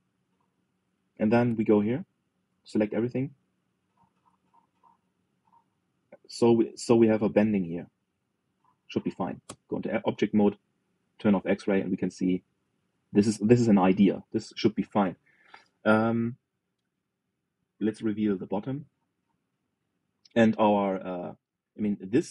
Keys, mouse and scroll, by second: 2.0 click, 2.8 alt+shift+click, 3.7 click, 4.9 ctrl+b, 9.3 click, 10.2 Tab, 11.2 click, 12.4-15.5 middle drag, 15.5 KP_3, 19.1 click, 19.6 middle click, 20.3 scroll down 1, 20.5-22.3 middle drag.